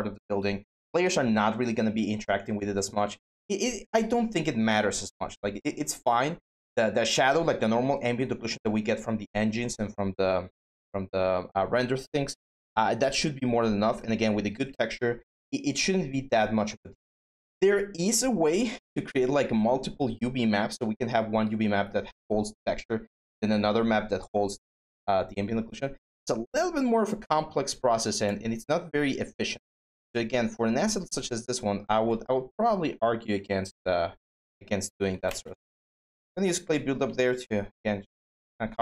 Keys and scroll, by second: 34.6-35.4 typing.